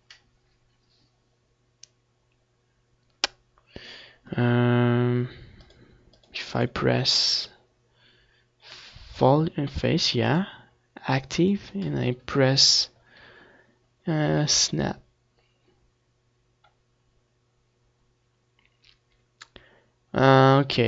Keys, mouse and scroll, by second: 4.7-7.6 drag, 9.5-11.3 drag.